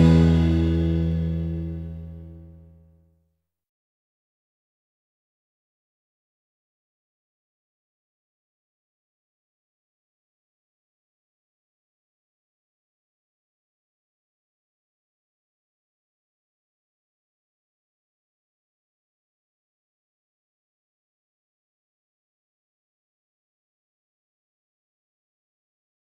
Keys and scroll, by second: 0.0 v, 1.1 g, 4.0 ctrl+z, 7.8 v, 9.5 g, 17.3 ctrl+z, 18.0 v, 19.0 g, 22.3 v.